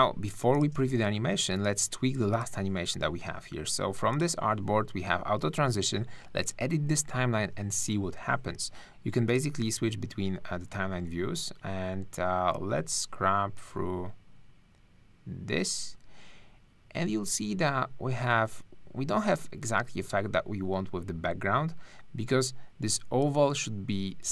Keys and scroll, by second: 0.7 space.